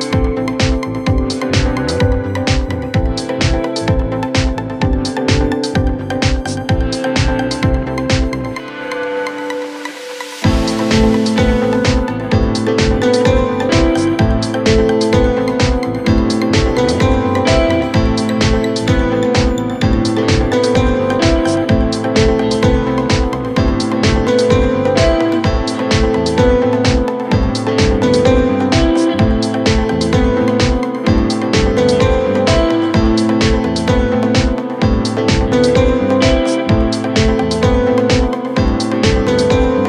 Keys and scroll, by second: 7.8-8.8 typing, 13.3-14.0 typing, 15.3-16.0 typing, 20.1-20.9 typing.